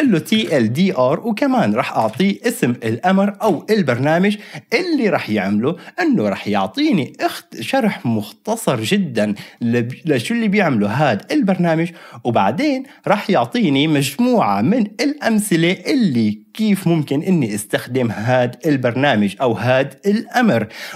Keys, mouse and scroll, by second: 0.0-0.8 typing, 1.9-2.6 typing, 3.4 Return, 11.7-20.9 drag.